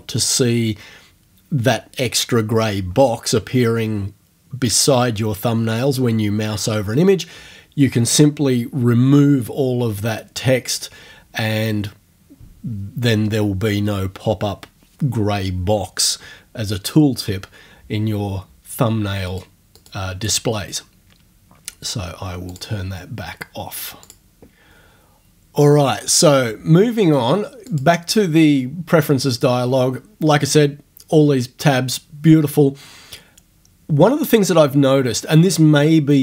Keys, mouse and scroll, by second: 19.3 click, 19.8 click, 22.5 click, 24.1 click, 27.7 click.